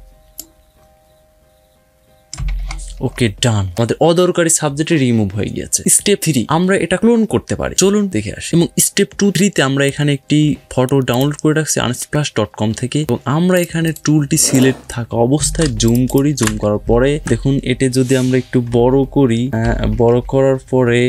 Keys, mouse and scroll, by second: 2.6-3.5 alt+scroll down 4, 3.5-3.9 alt+scroll up 3, 8.4 click, 10.9 click, 13.3 click, 13.7 right click, 14.3 click, 15.4 ctrl+space, 15.7 ctrl+click, 16.0 ctrl+space, 16.6-17.0 scroll down 3, 17.0-17.5 alt+scroll up 2, 18.6 alt+scroll down 1, 18.9-19.3 alt+scroll up 2, 19.5 ], 19.7 ], 19.9 ], 20.1 ].